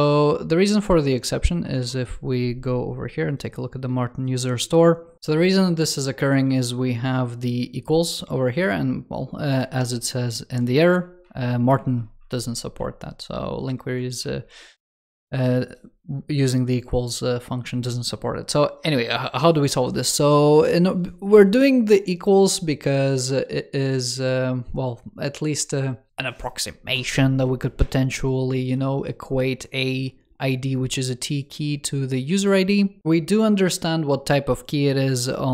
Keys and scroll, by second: 9.7 super+t, 13.9 super+t.